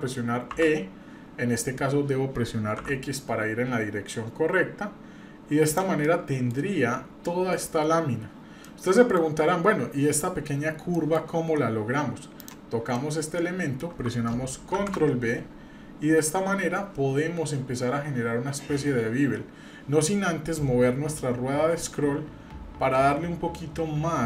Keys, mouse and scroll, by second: 0.5 e, 6.0 middle click, 8.6 middle click, 10.5-10.8 scroll up 2, 10.9 shift+middle click, 12.4 click, 12.9 middle click, 14.7 ctrl+b.